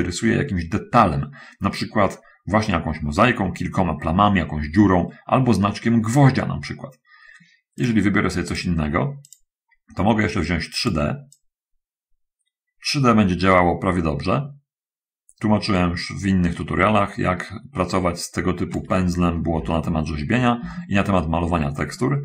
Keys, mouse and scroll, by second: 8.2 click, 9.6 click, 11.0 click, 11.7-19.2 drag, 19.8 ctrl+z, 20.6-22.2 shift+middle drag.